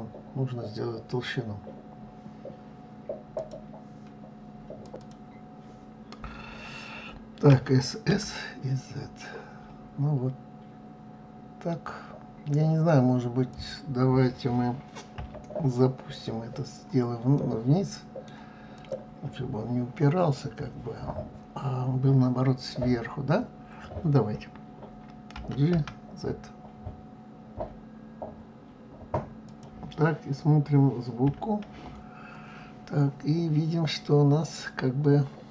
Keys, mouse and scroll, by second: 1.0-1.4 scroll down 4, 4.6 click, 7.0 s, 14.7 KP_3, 16.9-18.3 middle drag, 18.3 click, 24.9 g, 30.8 KP_1, 31.2 KP_1, 31.4 KP_1.